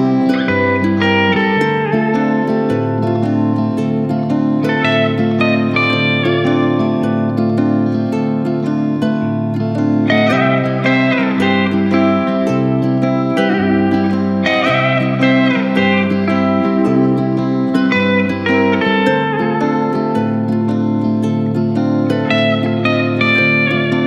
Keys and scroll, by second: 0.2 ctrl+z, 0.5 =, 3.0 ctrl+z, 8.6 Down, 23.0 Return.